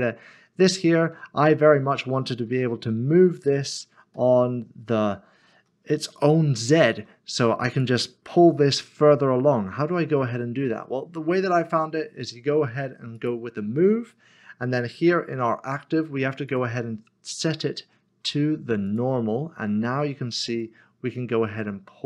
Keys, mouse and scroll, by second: 0.7 click, 2.5 typing, 4.2-5.0 typing, 6.1-6.9 typing, 13.2 click, 16.5 click, 18.9 click.